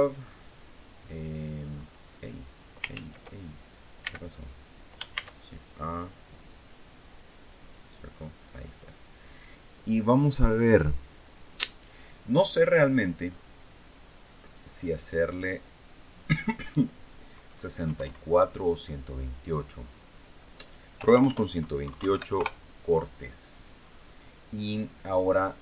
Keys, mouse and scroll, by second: 0.0-0.4 scroll up 2, 0.5 scroll down 2, 1.4-1.8 scroll up 2, 2.7 ctrl+z, 3.7 x, 4.0 click, 4.9 shift+a, 7.5 click, 15.8 click, 17.6 KP_6, 17.7 KP_4, 20.7 BackSpace, 21.6 KP_1, 21.6 KP_2, 21.8 KP_8, 22.1 KP_Enter, 23.6-24.1 scroll up 2, 24.4 scroll up 2.